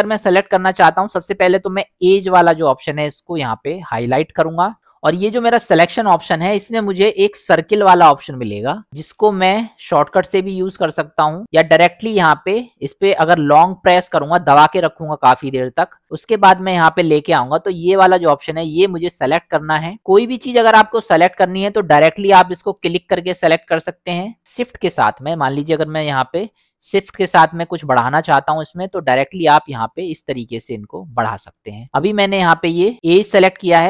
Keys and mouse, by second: 2.0 click, 5.8-14.0 drag, 14.6-19.2 drag, 20.2 middle click, 23.6 middle click, 27.2-28.4 middle drag, 29.4-31.6 shift+drag.